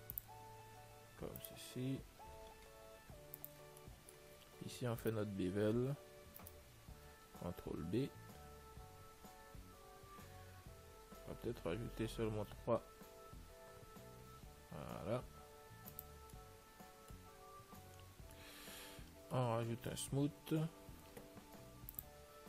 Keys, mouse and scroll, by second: 1.4 ctrl+r, 3.9-8.1 middle drag, 5.3-8.5 right drag, 8.1 ctrl+b, 16.6-21.9 middle drag, 18.4 Tab, 22.2 click.